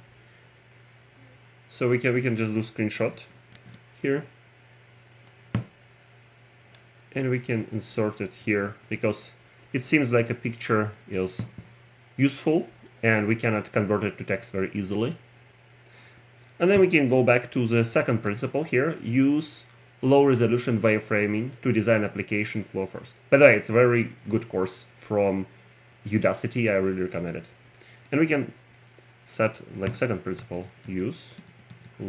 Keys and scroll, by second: 0.0-0.5 typing, 6.8 a, 8.7 super+v, 10.2 Return, 18.1 shift+Tab.